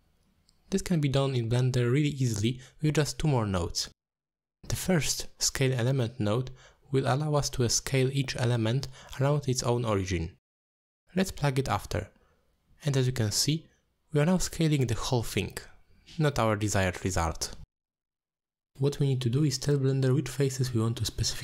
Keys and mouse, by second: 4.5 middle drag, 5.0 shift+a, 9.2 click, 10.3-11.6 shift+drag, 11.6-13.8 shift+middle drag, 13.8 shift+click, 15.1 click, 18.1-18.4 drag, 18.8 click.